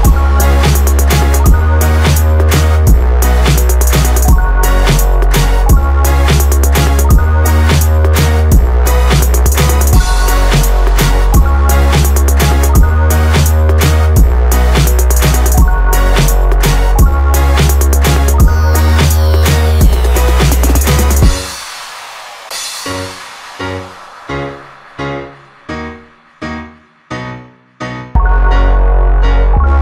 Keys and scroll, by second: 1.1 Return.